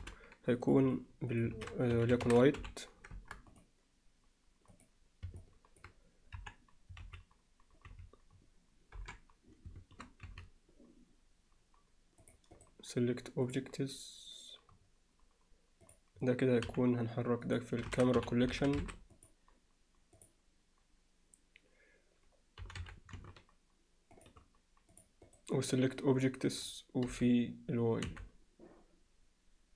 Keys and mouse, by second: 0.9 click, 1.4-3.3 alt+shift+drag, 3.5 click, 5.4-5.8 middle drag, 6.4 KP_1, 7.0 z, 7.9 z, 9.4 KP_7, 10.3 z, 12.2 click, 12.6-13.6 right drag, 15.9 click, 16.7 m, 22.6 g, 25.7-26.3 right drag, 27.7 g.